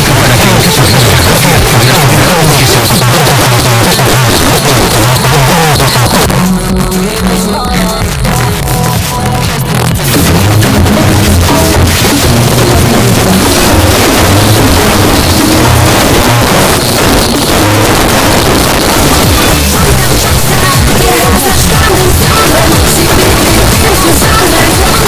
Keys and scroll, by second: 2.9 Page_Down, 16.2 Page_Down.